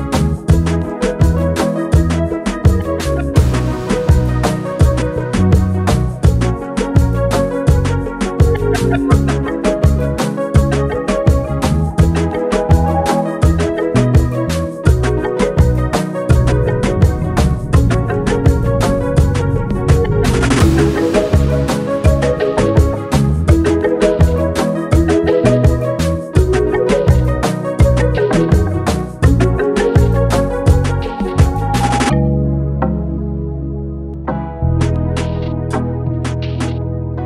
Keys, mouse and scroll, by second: 3.4 typing, 7.4 space, 10.4 click, 10.4 typing, 12.3 typing, 12.4 click, 13.8-15.2 drag, 15.2 alt+click, 16.2 space, 16.5 click, 16.7 space, 17.6 click, 19.7 click, 22.0 ctrl+F7, 22.4 ctrl+v, 23.8-25.6 drag, 25.7-27.7 drag, 28.7 right click, 29.3 click, 32.6-34.1 drag, 35.0-37.2 drag.